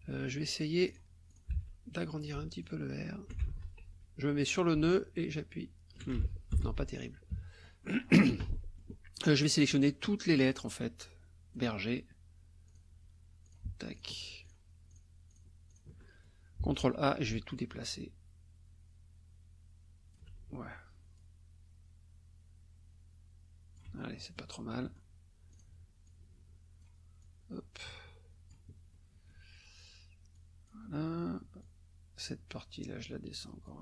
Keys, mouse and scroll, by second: 0.9 click, 1.3 ctrl+click, 1.5 ctrl+a, 2.6 alt+click, 3.5 ctrl+alt+z, 4.6-6.2 alt+drag, 6.2 ctrl+alt+z, 6.5 ctrl+alt+F1, 7.3 KP_Subtract, 7.8 click, 8.5 click, 9.7-11.7 drag, 12.7 click, 13.4 shift+click, 13.9 shift+click, 14.4 shift+click, 14.9 shift+click, 15.3 shift+click, 15.7 shift+click, 16.0 shift+click, 16.7 ctrl+a, 17.5-20.3 alt+drag, 21.2-24.0 alt+drag, 24.2 alt+middle click, 24.8 middle click, 25.5 click, 26.0 click, 27.2-28.7 drag, 28.9 middle click, 30.4 click, 31.6 click, 32.8-33.8 drag.